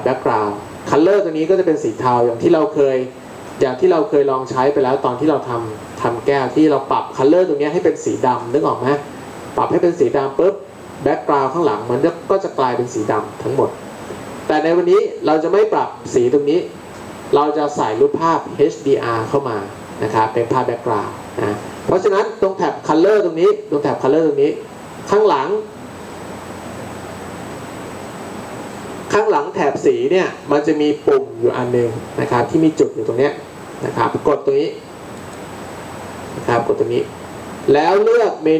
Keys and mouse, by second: 35.2-38.5 drag.